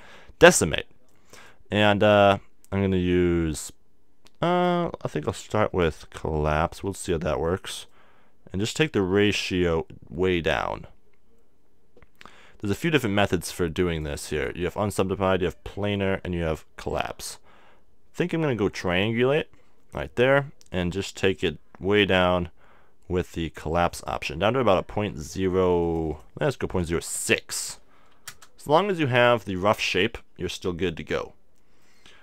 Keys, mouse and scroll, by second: 6.1-10.1 drag, 19.7-21.4 drag, 25.8-29.2 drag, 26.8 BackSpace, 29.8-32.2 middle drag.